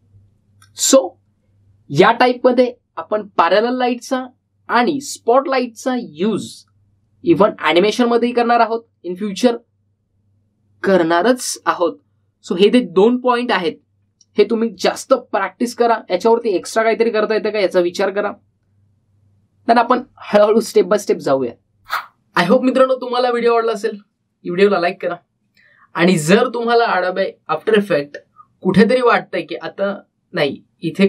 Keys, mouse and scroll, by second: 15.6 click, 17.2-18.0 typing.